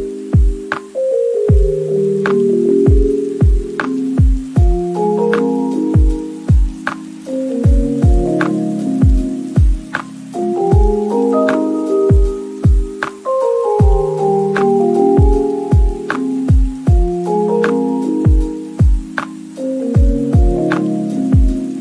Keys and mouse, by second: 0.0-3.5 typing, 1.6 click, 1.7 shift+middle click, 2.3 Tab, 3.0 Tab, 4.5 middle click, 4.9 middle click, 5.1 s, 5.8 Tab, 5.9 Tab, 6.1 s, 6.2 y, 6.4 click, 6.8 drag, 7.1 middle click, 7.4-12.9 typing, 7.8 click, 8.2 middle click, 9.3 click, 9.9 middle click, 10.8 middle drag, 11.5 click, 11.7 Tab, 12.7 ctrl+r, 12.8 click, 14.1 3, 15.6-20.2 typing, 17.0 shift+click, 17.4 middle click, 17.6 ctrl+z, 17.8 middle click, 19.9 Tab, 20.0 click, 20.4 middle click, 20.7 click, 21.4 click, 21.4 n.